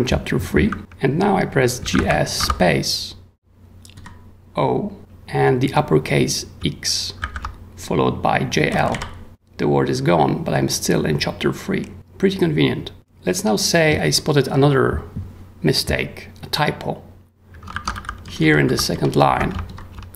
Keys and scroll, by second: 1.6-2.4 typing, 3.9 o, 7.2 shift+x, 8.4-9.4 typing, 17.7 ctrl+w, 18.0-20.1 typing.